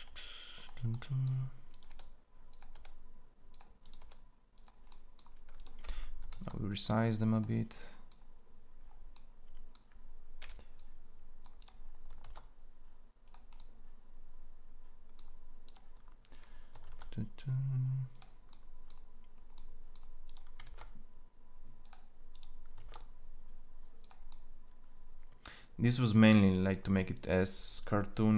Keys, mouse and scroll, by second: 1.7 e, 2.5 e, 4.7 e, 6.1 ctrl+a, 10.2 c, 11.9 ctrl+a, 16.7 ctrl+a, 20.4 ctrl+a, 22.5 ctrl+a.